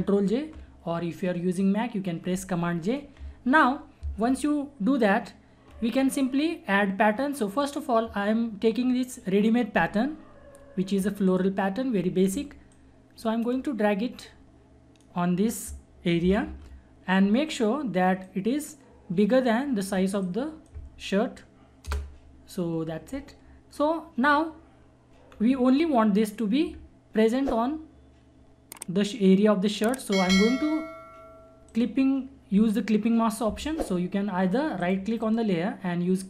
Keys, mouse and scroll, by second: 0.3 ctrl+j, 7.5 click, 11.3-16.4 drag, 16.4 ctrl+-, 18.2 click, 18.2-21.9 drag, 21.9 Return, 25.3 scroll down 1, 31.6 right click, 34.8 click, 35.2 right click, 35.4 right click.